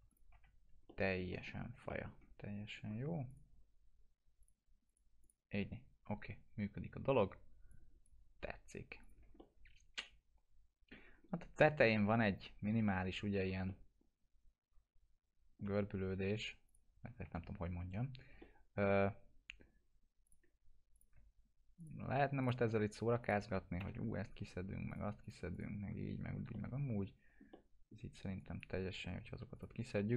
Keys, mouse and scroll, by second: 0.1 click, 0.3 F4, 0.9 alt+middle click, 1.5-3.3 scroll down 4, 1.9 middle click, 3.3 scroll up 2, 3.3 click, 7.7-8.3 drag, 9.7-10.9 alt+middle drag, 11.2 scroll up 1, 11.6 middle click, 12.2 scroll up 1, 12.6 F4, 13.3 scroll down 1, 13.7 alt+middle click, 13.7-15.8 alt+middle drag, 16.7 click, 17.2 F4, 18.4-19.0 alt+middle click, 19.3 scroll up 1, 20.2 click, 21.8 ctrl+click, 23.8 ctrl+BackSpace, 24.9 click, 25.8 F4, 26.2 scroll down 1, 26.5-27.4 alt+middle click, 27.5-28.1 middle click, 27.9 scroll down 1, 28.4 click, 30.0-30.1 alt+middle drag.